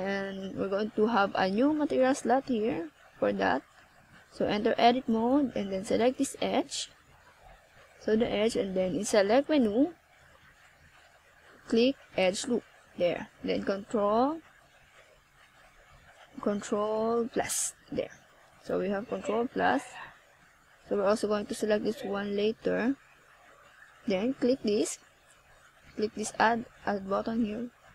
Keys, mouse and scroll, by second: 3.0 click, 8.1 click, 10.8 scroll up 3, 12.8 click, 13.0 click, 13.2 click, 13.5 click, 14.1 click, 15.6 click, 16.5 middle click, 20.2 KP_1, 20.5 z, 21.3 z, 21.6 z, 23.3 click, 24.9 click, 25.5 z, 26.0 z.